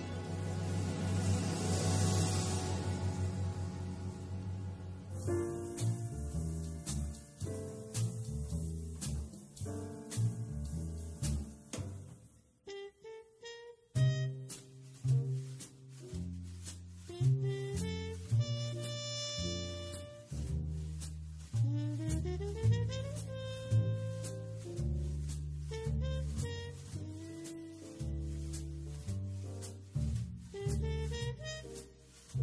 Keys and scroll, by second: 17.8 super+space.